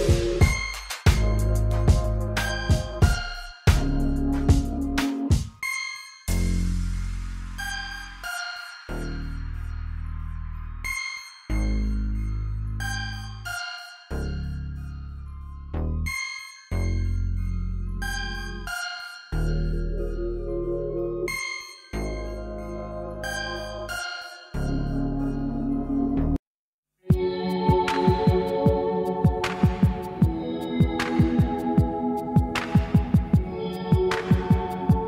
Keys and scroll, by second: 0.2 g, 0.7 g, 1.1 r, 2.0 g, 5.2 g, 8.3 g, 9.5 KP_1, 13.3 r, 17.2-19.9 typing, 27.6 KP_3, 30.6 Page_Up, 32.5 shift+a.